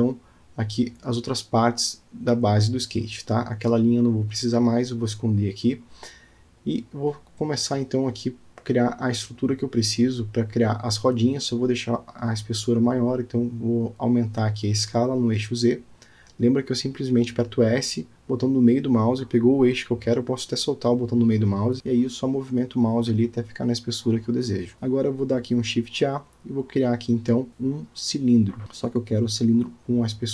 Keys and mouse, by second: 0.1-0.9 drag, 3.2 click, 3.9 Tab, 5.6-6.1 drag, 6.8-8.1 drag, 8.2-8.6 alt+middle drag, 9.4 click, 10.1-10.9 middle drag, 11.6 click, 11.8 middle click, 12.5 s, 15.3-16.9 middle drag, 18.0-18.4 middle drag, 18.7 click, 19.0 click, 20.1 click, 22.4-23.1 drag, 23.5 alt+middle drag, 23.9-24.4 middle drag, 24.5-24.9 shift+middle drag, 28.5-30.3 drag.